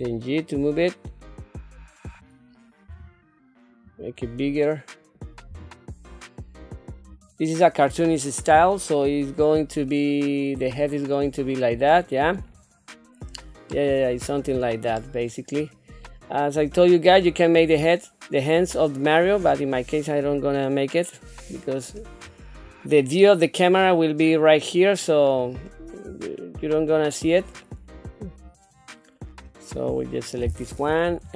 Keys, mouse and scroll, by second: 2.9 s, 5.5 g, 8.5 KP_7, 9.4 scroll down 1, 9.9 middle click, 10.8 scroll down 2, 11.3 middle click, 12.4 click, 13.0 scroll down 1, 13.7 middle click, 14.9 middle click, 15.5 scroll up 1, 16.0-17.1 middle drag, 19.3 scroll up 3, 20.2-21.9 middle drag, 22.2-22.8 scroll down 4, 23.2 middle click, 23.8 scroll down 2, 24.3 middle click, 25.3-25.8 scroll up 2, 26.2 shift+middle click, 26.8-27.2 scroll up 4, 27.6-29.4 middle drag, 30.2 click, 31.0 KP_3.